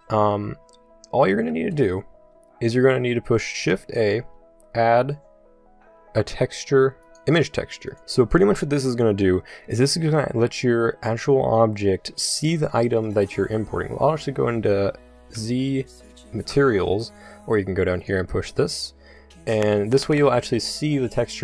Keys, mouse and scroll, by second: 3.7 shift+a, 15.3 z.